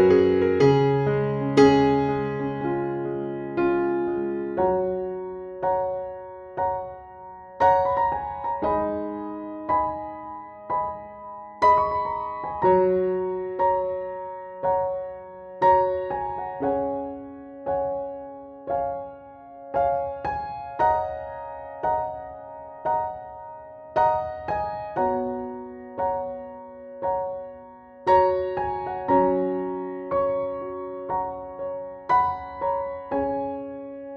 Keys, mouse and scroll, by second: 7.8 scroll down 1, 8.6-9.9 scroll up 1, 10.7-15.8 drag, 18.8 Delete, 19.5-23.8 drag, 25.0 ctrl+z, 25.6 ctrl+z, 26.4-33.8 drag.